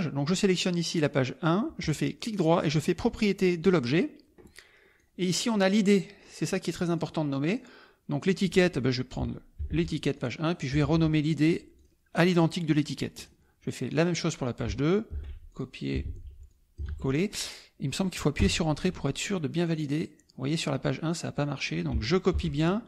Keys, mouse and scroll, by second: 1.8 right click, 3.6 click, 5.0 click, 6.9 click, 7.7 click, 8.2 click, 10.1 ctrl+c, 10.1 ctrl+click, 10.5 ctrl+click, 10.8 ctrl+v, 11.7 click, 12.7 click, 13.9 click, 15.1 ctrl+c, 15.5 ctrl+click, 16.4 ctrl+v, 16.4-17.5 ctrl+drag, 16.8 ctrl+v, 18.9 Return, 19.6 click, 21.4 click, 22.3 ctrl+c.